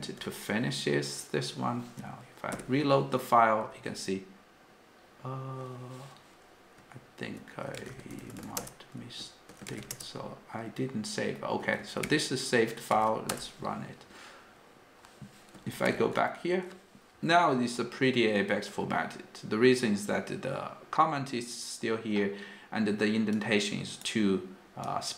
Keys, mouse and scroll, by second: 3.8 g, 8.4-9.9 typing, 9.9 Return, 23.3 click, 23.4 click, 23.5 click, 23.6-25.1 click, 24.9 click, 25.0 click.